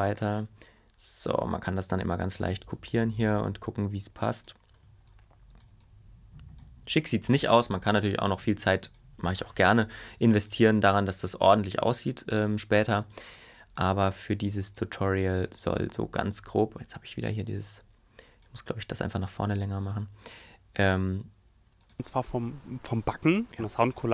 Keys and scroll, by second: 9.6 BackSpace.